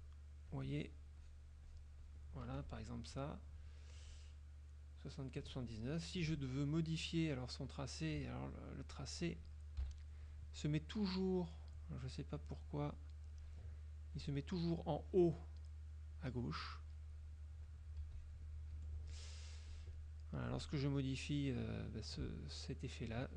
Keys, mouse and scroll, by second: 0.6 click, 1.3 click, 1.9 click, 2.6 F2, 7.2 click, 9.7 click, 9.9 KP_5, 10.7 click, 13.4 click, 14.2 click, 15.1 click, 16.2-18.0 drag, 18.1 z, 18.2 click, 18.8 F2, 19.8 click, 20.5 click, 22.0-23.3 drag.